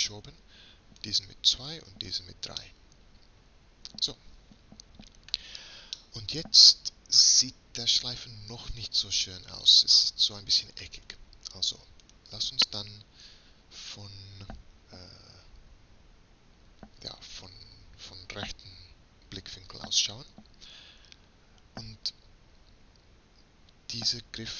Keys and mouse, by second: 3.1-4.9 middle drag, 8.0 middle click, 12.1-14.1 drag, 15.5 KP_3.